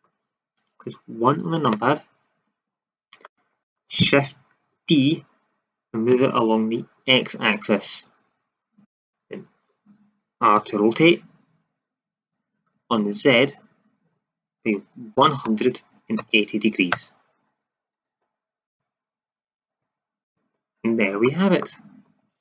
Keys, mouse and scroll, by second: 1.6 KP_1, 4.9 shift+d, 8.9-10.5 drag, 10.5 r, 18.6-21.2 drag.